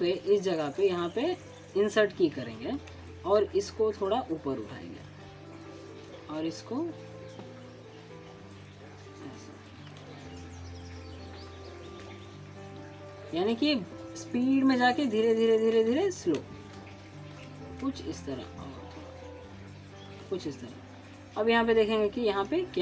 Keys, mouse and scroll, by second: 0.8 alt+scroll up 1, 1.0 alt+middle click, 1.7 click, 3.2 right click, 4.1 click, 4.8 alt+scroll up 1, 5.1 alt+middle click, 5.6 click, 6.2-7.8 shift+middle drag, 8.1-8.7 drag, 12.7-14.6 shift+middle drag, 14.7 click, 15.1 alt+scroll down 1, 15.3 alt+middle click, 15.7 alt+scroll up 1, 16.0 alt+middle click, 18.0 scroll up 1, 18.4 alt+middle click, 19.4-20.0 shift+middle click, 20.1 click, 20.5-22.7 shift+middle drag, 22.7 shift+click.